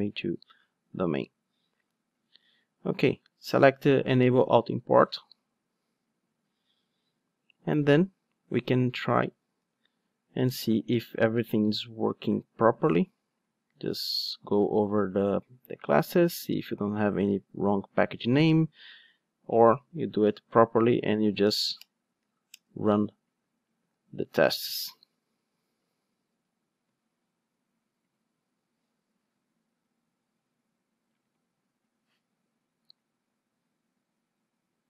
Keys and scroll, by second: 9.6 alt+super+l, 20.4 Right, 20.5 Down, 20.9 Right, 21.1 Down, 23.7 Down, 23.8 super+r.